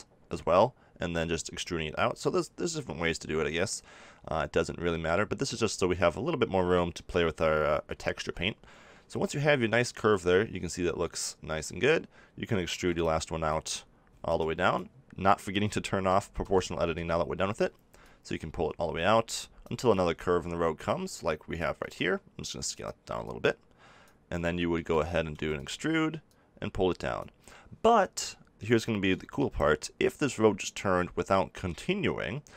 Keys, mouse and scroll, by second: 9.9 z, 11.6 z, 12.7 e, 16.0 o, 16.4 o, 16.9 o, 20.8 click, 21.7 s, 24.6 middle click, 25.3 e, 25.6-27.9 drag, 29.1-32.5 middle drag.